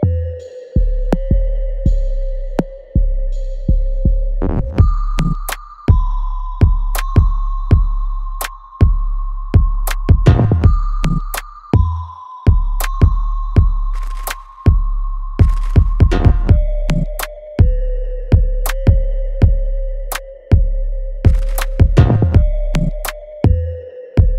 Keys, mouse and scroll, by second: 2.1 alt+right click, 2.6-4.7 alt+drag, 4.7 alt+right click, 5.4 alt+middle click, 6.7 click, 8.3-15.2 ctrl+drag, 15.7 alt+right click, 16.1 alt+click, 16.6 alt+middle click, 17.1 alt+right click, 18.1 alt+click, 19.7 alt+click, 21.2 ctrl+s, 21.7 click, 22.9 scroll down 1, 23.0-23.3 scroll up 1, 24.1-24.3 drag.